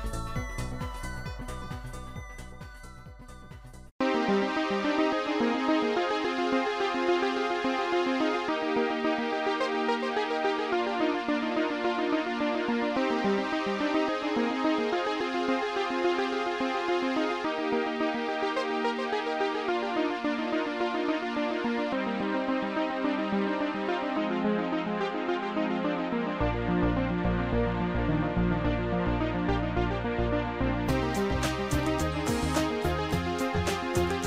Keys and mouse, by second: 0.4 shift+click, 1.4 Delete, 1.4 shift+click, 2.2 Delete, 2.2 click, 3.3 Delete, 3.3 click, 6.9 Delete, 6.9 click, 7.9 click, 11.6 click, 12.5 click, 14.0 click, 19.6 click, 31.2 shift+click.